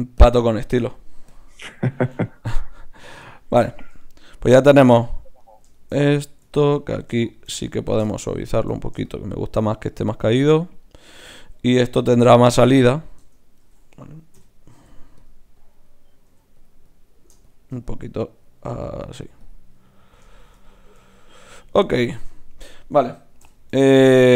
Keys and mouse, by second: 0.5-1.7 right drag, 1.7-3.3 drag, 7.2-11.1 drag, 12.1 Tab, 13.2 Tab, 14.3 k, 14.7 f, 15.6-22.5 drag, 16.2 f, 23.4 KP_1.